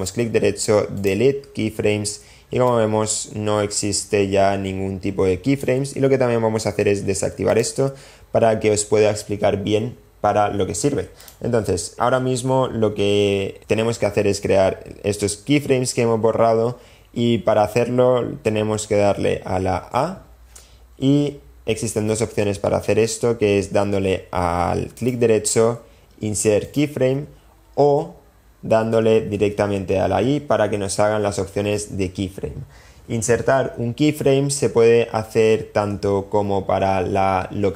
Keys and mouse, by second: 1.0-1.8 drag, 2.6-5.6 drag, 11.1 click, 19.8 a, 25.1-27.8 drag, 29.9 click.